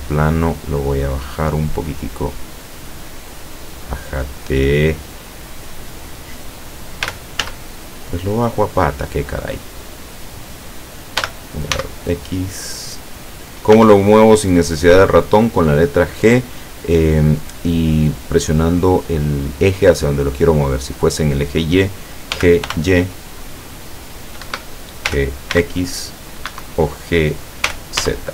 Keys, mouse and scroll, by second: 0.8 scroll up 1, 1.5 click, 2.9 click, 4.1 click, 4.9 click, 7.1 g, 7.5 z, 9.2 click, 9.8 click, 11.2 g, 11.7 x, 13.1 click, 13.8 s, 14.8 click, 22.3 g, 22.7 y, 24.5 Escape, 25.6 x, 26.5 Escape, 27.7 g, 28.1 z.